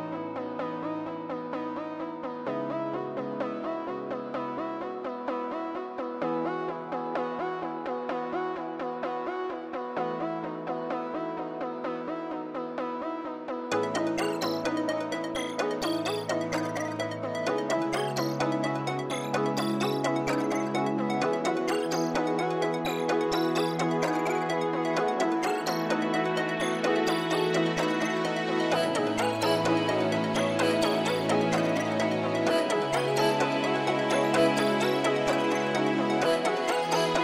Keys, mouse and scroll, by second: 0.4 scroll up 1, 0.9 middle click, 4.3 middle click, 4.4 scroll up 1, 4.5 scroll down 1, 13.5 scroll up 1, 15.1 scroll up 1, 16.2 scroll down 1, 16.3 middle click, 20.3 scroll down 1, 20.7 scroll up 1, 21.0 middle click, 24.8 middle click, 24.9 scroll down 1, 25.4 middle click, 29.3-31.5 scroll up 2, 29.5 middle click.